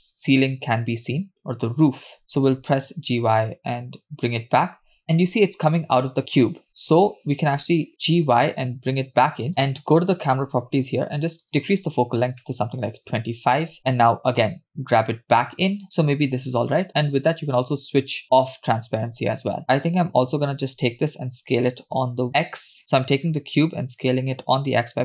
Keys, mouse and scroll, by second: 2.6 g, 6.9 KP_0, 7.8 scroll down 1, 7.9 KP_0, 8.2 g, 10.4 click, 12.7-13.7 drag, 15.8 g, 17.3 click, 19.6 click, 21.7 s.